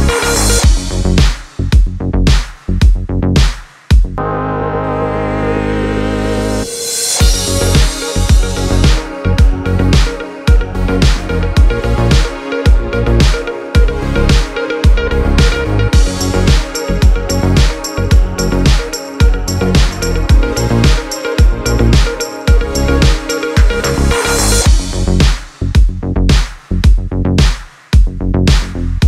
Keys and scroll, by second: 4.2 space, 14.2 space, 15.6 n, 16.4 space, 22.2 space, 28.3 space.